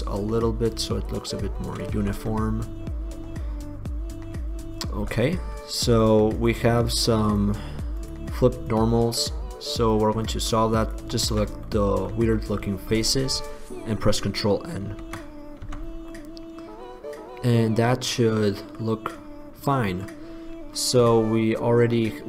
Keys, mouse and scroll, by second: 1.5 middle click, 2.3 Tab, 2.5-2.9 middle drag, 3.7 middle click, 3.9-4.3 middle drag, 5.2 Tab, 11.9 click, 12.0 click, 12.3 click, 12.7 click, 14.9 ctrl+n, 15.9 Tab, 19.9-22.2 middle drag.